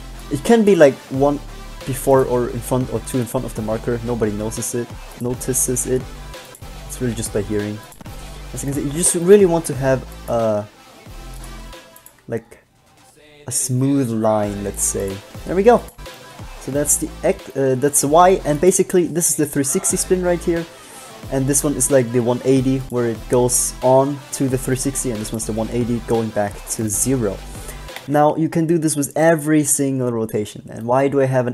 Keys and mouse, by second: 0.4 b, 1.0-2.0 drag, 1.2 g, 8.8 middle click, 10.4 g, 12.4 g, 13.6 click, 14.0-15.0 drag, 16.0-17.8 drag, 19.2 right click, 20.8 click, 23.0-24.8 drag, 28.2 alt+a.